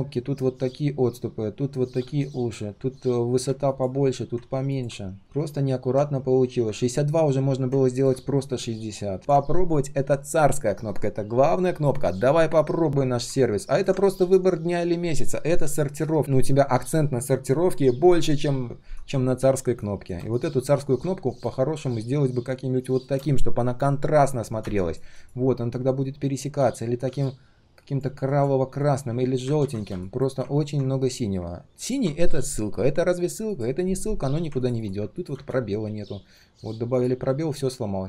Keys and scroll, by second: 21.3 ctrl+alt+v, 29.6 ctrl+z.